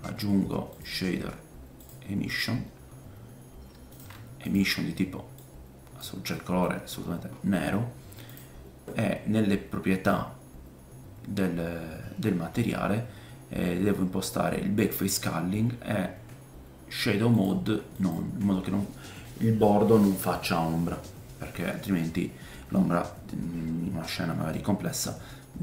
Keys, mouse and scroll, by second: 2.6-3.3 scroll up 1, 3.3-3.8 scroll up 2, 4.4 middle click, 4.4 right click, 6.3 middle click, 6.7-7.5 scroll up 4, 12.6-14.8 scroll down 3, 14.8 middle click, 14.8 right click, 24.0 middle click.